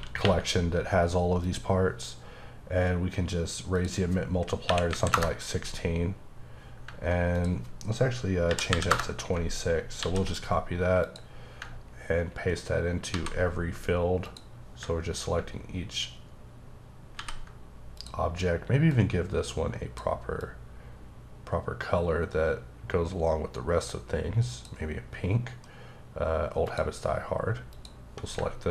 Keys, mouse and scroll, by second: 1.4 click, 3.7 click, 4.6 KP_1, 5.1 KP_Enter, 7.3 click, 8.5 KP_2, 8.9 KP_Enter, 10.0 ctrl+c, 11.0 click, 13.1 ctrl+v, 14.2 click, 17.0 ctrl+click, 17.2 ctrl+v, 17.9 click, 18.9 click, 20.4 click, 26.6 click, 27.7 click.